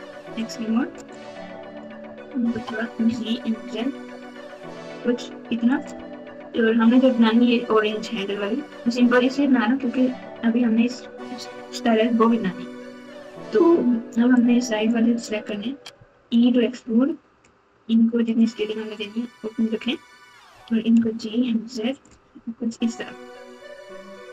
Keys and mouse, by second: 0.5 click, 1.2 click, 2.5 g, 14.3 click, 14.5 click, 15.9 e, 18.9 click, 19.1 click, 20.5 g.